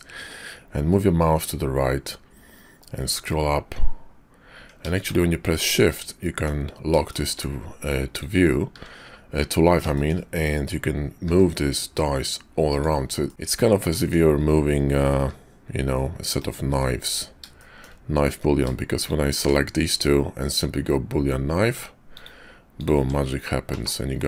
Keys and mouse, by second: 5.6 middle click, 7.1 shift+click, 8.7 `, 9.9 shift+click, 11.1 g, 13.2 middle click, 15.2 g, 16.7 `, 17.6 shift+middle click, 19.3 q, 22.8 click, 23.0 Tab, 23.7 /.